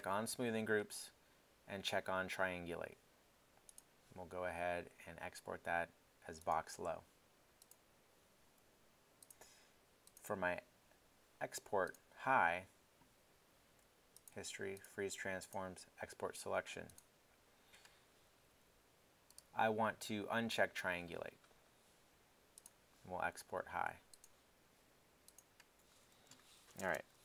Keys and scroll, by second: 26.8 super+space.